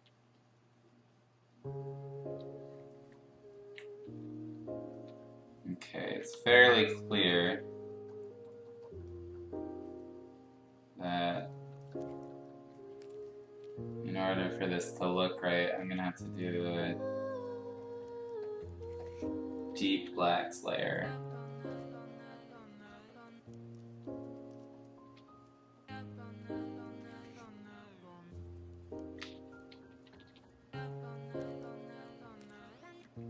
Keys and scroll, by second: 0.0-0.7 typing, 2.2 ], 4.0 ], 4.2 ], 4.3 ], 4.9 ], 6.0 ctrl+z, 6.3 x, 7.3 ctrl+z, 15.7 ctrl+z, 19.7 ctrl+z, 19.9 ctrl+z, 25.1 x, 29.1 ctrl+z, 29.7 [, 29.9 [, 30.2 [, 32.9 ctrl+z.